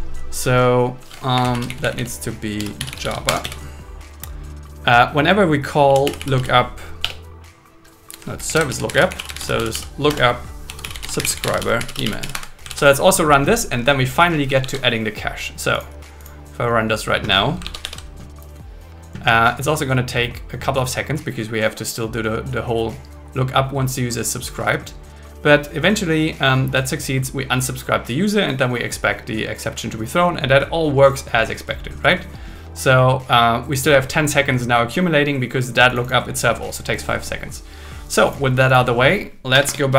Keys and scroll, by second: 1.3 Up, 1.5 super+Right, 1.7 Left, 3.2 Escape, 3.4 Down, 7.0 BackSpace, 8.6 shift+super+Left, 9.0 shift+super+Left, 10.1 Return, 12.3 Escape, 12.7 super+s, 14.6 super+1, 17.6 super+1.